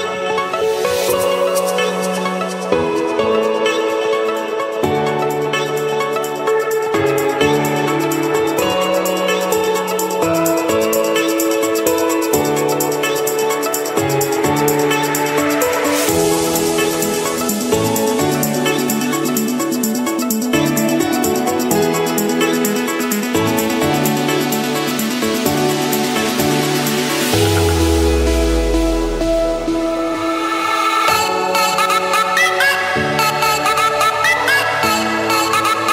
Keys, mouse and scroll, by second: 1.0-2.2 drag, 3.2 click, 3.6-4.7 drag, 5.4 click, 5.4-5.8 scroll, 6.5-7.2 scroll, 7.2 Escape, 7.8 right click, 9.1-10.2 drag, 11.1-12.3 drag, 13.2-14.3 drag, 16.4-17.4 drag, 20.0 click, 21.0 click, 24.4 click, 25.7 click, 26.0-26.6 scroll down 4, 26.6-28.0 scroll up 9, 28.6 click, 28.9 middle click, 29.8 Escape, 32.3-33.1 typing, 34.3 Return.